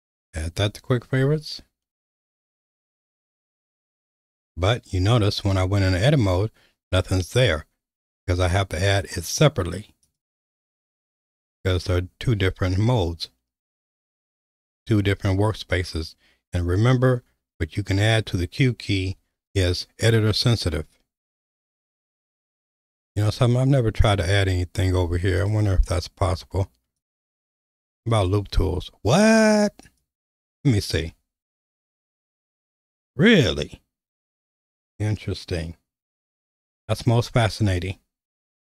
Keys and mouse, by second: 1.0 Tab, 2.7-3.7 drag, 5.5 q, 10.1 click, 19.1 q, 22.2 n, 25.4 click, 27.0 click, 28.2-30.2 right drag, 32.1 q, 38.6-38.7 right drag.